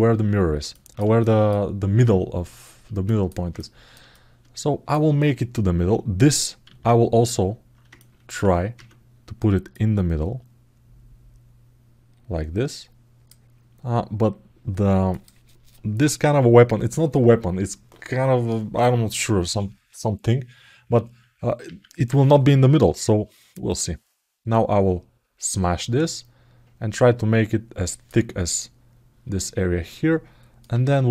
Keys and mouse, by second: 0.5 ctrl+alt+middle click, 0.9 alt+shift+middle click, 2.8 alt+shift+middle click, 3.3 ctrl+alt+middle click, 3.9 alt+shift+middle click, 6.5 alt+q, 7.7 ctrl+alt+middle click, 9.5-13.0 drag, 14.9 click, 21.5 alt+q, 23.5-27.8 drag, 29.1-30.4 alt+middle drag, 31.0-31.1 drag.